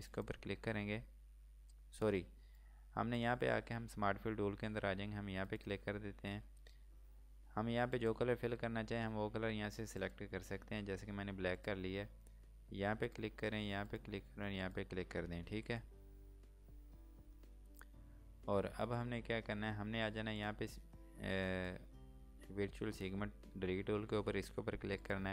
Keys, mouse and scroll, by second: 0.1 click, 16.2-17.5 scroll down 1, 17.5 scroll up 1, 20.4 scroll up 1, 20.5 click, 24.8 click.